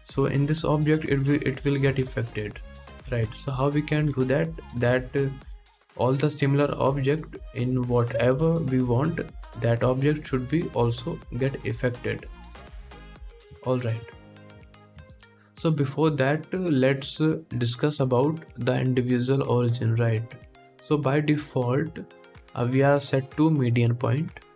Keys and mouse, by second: 1.5 ctrl+Tab, 1.9-3.1 drag, 2.8 ctrl+z, 3.0 ctrl+z, 3.8 ctrl+z, 4.4 ctrl+Tab, 7.9-12.4 drag, 12.4-17.2 middle drag, 12.5 x, 17.2-24.5 drag.